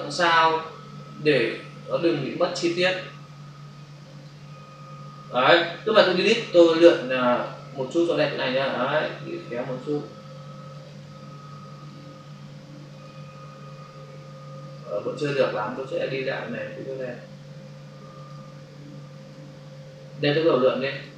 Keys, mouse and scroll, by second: 1.4 click, 4.0 click, 6.2 Delete, 7.3 click, 10.7 click, 12.8 click, 16.8 click, 19.1 click, 19.7 Delete.